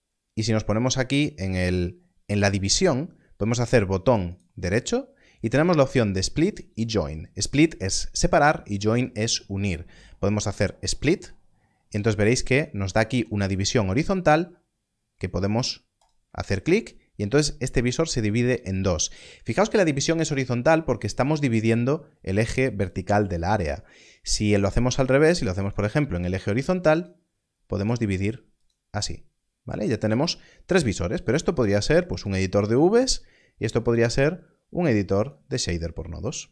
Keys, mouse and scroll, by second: 10.8 click, 15.9 click, 25.5 click, 31.0 click, 35.2 click.